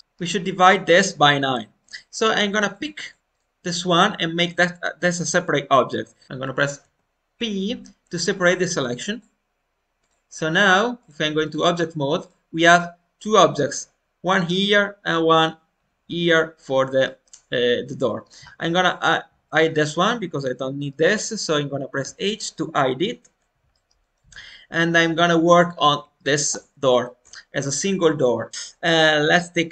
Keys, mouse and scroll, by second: 0.0-2.6 shift+middle drag, 2.6-28.5 drag, 18.8-19.6 scroll down 2.